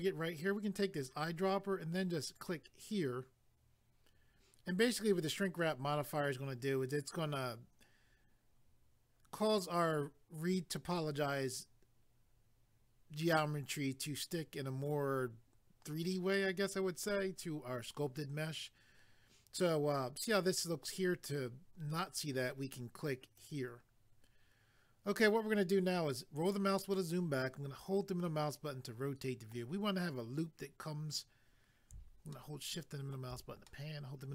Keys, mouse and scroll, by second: 0.9 click, 2.4 click, 23.4 click, 25.9 scroll down 1, 26.9 middle click, 32.4 shift+middle click, 33.7 middle click.